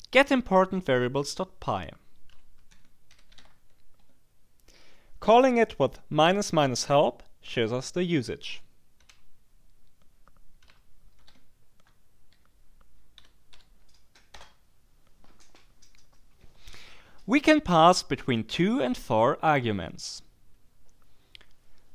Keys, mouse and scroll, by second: 2.1-3.9 typing, 4.0 Tab, 9.0 /, 10.6 /, 11.2 h, 11.3 Tab, 12.3 e, 13.2 l, 13.5 p, 14.3 Return.